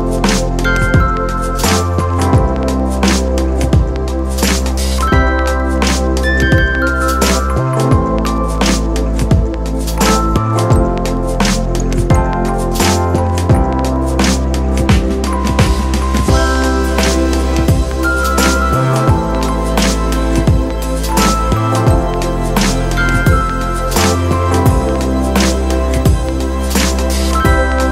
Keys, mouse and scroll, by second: 8.0 Up.